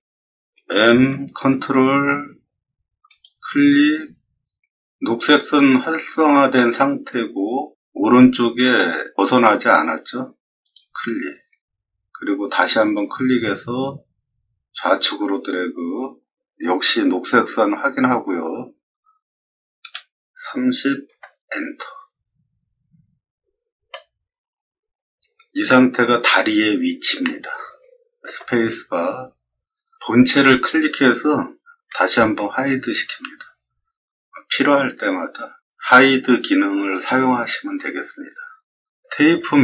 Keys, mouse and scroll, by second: 0.5 m, 3.0 click, 10.6 click, 12.7 click, 19.8 3, 20.4 0, 21.0 Return, 23.2 middle click, 28.2 space, 30.2 click, 31.8 h, 39.2 t.